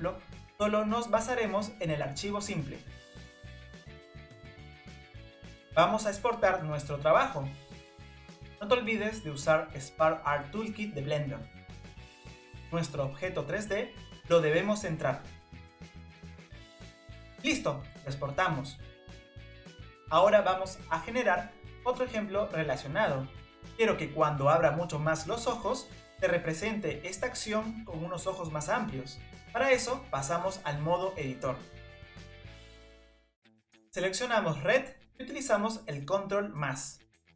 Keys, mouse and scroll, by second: 3.5 middle click, 3.7 scroll down 2, 3.8 scroll up 1, 6.9 Tab, 9.0 n, 12.6 click, 13.6-15.2 scroll down 2, 15.5-18.2 drag, 29.1 scroll down 1, 29.5-29.9 scroll up 2, 31.3 Tab, 32.4 click, 32.9 Tab, 34.1 click, 35.0-36.8 drag, 36.8 ctrl+KP_Add.